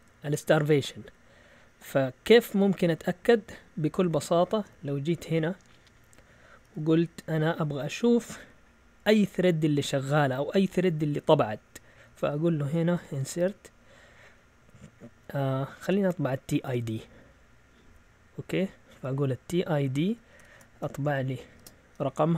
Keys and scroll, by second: 2.9-4.1 Right, 12.7-13.9 typing, 15.8-16.7 typing, 17.7-18.9 typing, 20.3-21.6 typing.